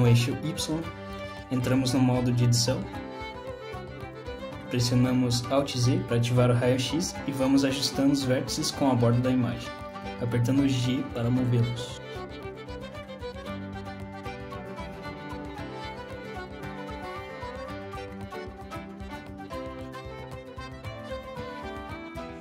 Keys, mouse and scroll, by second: 2.4 click, 4.6 shift+middle click, 4.7 scroll up 2, 5.0 shift+middle click, 5.8 click, 6.7 Tab, 7.4 click, 8.5 alt+z, 9.5 g, 12.4 click, 12.8 g, 15.3 click, 15.6 g, 17.3 click, 17.6 g.